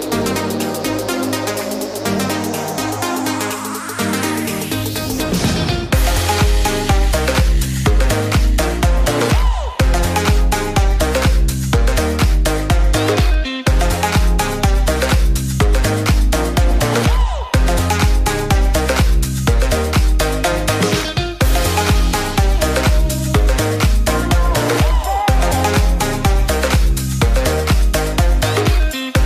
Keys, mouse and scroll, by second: 0.4-3.4 drag, 7.7 click, 9.9-12.9 right drag, 15.8-17.1 right drag, 18.7-20.5 drag, 20.5 s.